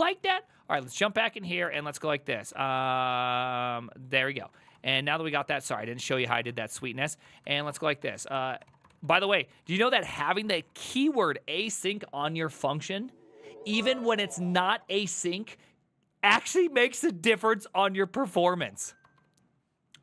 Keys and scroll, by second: 5.5-11.6 typing, 10.6 ctrl+c, 10.8 ctrl+c, 19.1 alt++.